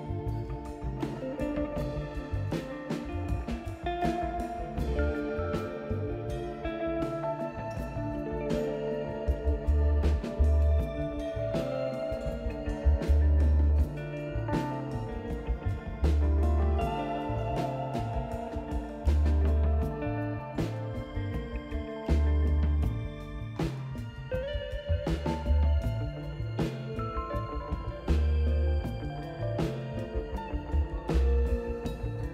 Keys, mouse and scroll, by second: 1.7 click, 2.9-3.9 typing, 5.1 click, 7.5 click, 9.4 click, 11.9-13.1 drag, 13.9 scroll down 1, 14.9 click, 15.2-15.6 scroll down 4, 15.7 click, 16.8 ctrl+scroll down 1, 17.1 ctrl+scroll up 2, 17.2 ctrl+scroll down 1, 18.9-19.7 ctrl+scroll down 5, 20.3 ctrl+click, 20.6-21.0 scroll down 4, 21.2 click, 22.0 right click, 23.4-23.9 ctrl+scroll up 4, 24.8 ctrl+scroll up 2, 25.6 ctrl+scroll up 2, 26.9 ctrl+click, 27.1-27.6 scroll down 4, 27.8 click, 28.7-29.1 ctrl+scroll up 4, 29.9 ctrl+click, 30.3-31.0 scroll down 6, 31.1 right click, 32.1 scroll up 2.